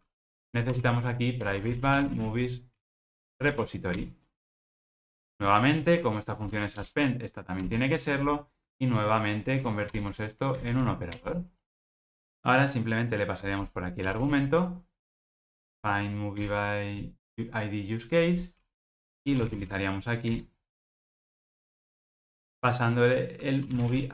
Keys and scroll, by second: 6.7 alt+Return.